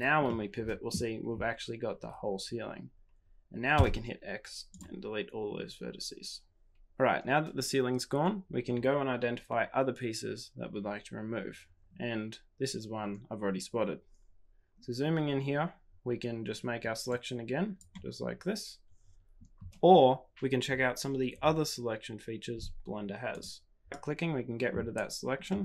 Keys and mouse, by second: 0.2 middle click, 17.1-18.8 drag, 25.4 middle click.